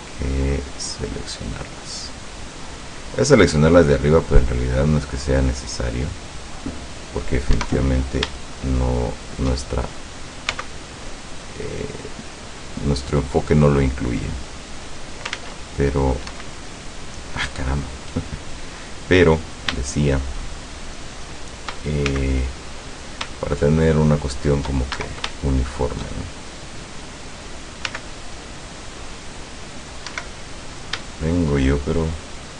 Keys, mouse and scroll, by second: 1.1-2.2 drag, 4.5 scroll up 1, 5.3-6.5 drag, 7.6 Escape, 8.5 shift+middle click, 9.4 shift+middle click, 10.6 g, 11.3 click, 13.3 click, 14.6 click, 15.4 ctrl+z, 16.3 Escape, 16.7 click, 18.1 middle click, 18.3-18.9 scroll up 1, 20.6 shift+right click, 21.3 shift+right click, 22.1 shift+c, 22.7 click, 23.5 shift+middle click, 24.3 shift+scroll up 1, 24.5 shift+middle click, 25.0 shift+Escape, 25.4 shift+middle click, 26.4 shift+scroll up 1, 26.6 middle click, 27.5 scroll down 2, 27.9 c, 28.7-30.1 drag, 30.1 Escape, 30.7 scroll up 2, 31.5 shift+right click, 32.2 shift+right click.